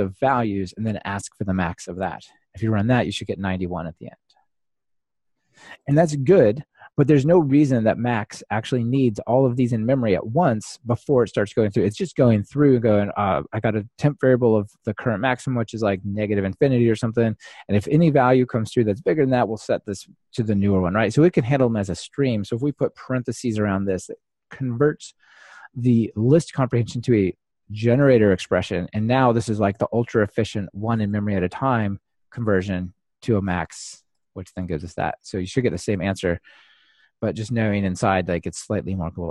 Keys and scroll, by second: 2.5 ctrl+r, 29.4 ctrl+alt+shift+Left, 30.2 ctrl+alt+shift+Right, 32.8 ctrl+alt+shift+Left, 37.2 ctrl+r.